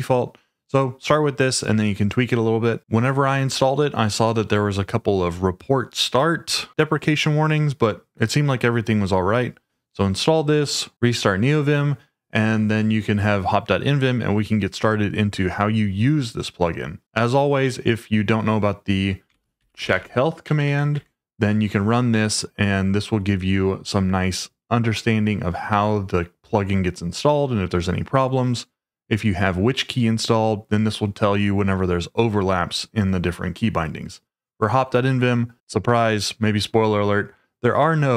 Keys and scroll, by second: 2.8 Escape, 19.1-20.4 typing, 20.5 Tab, 20.6 Tab, 21.0 Tab.